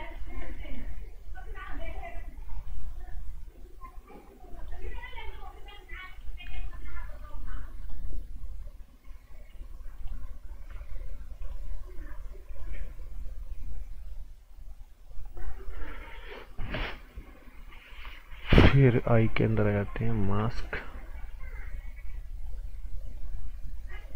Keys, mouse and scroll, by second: 0.0 click, 11.4 click, 18.9 click, 22.3 click.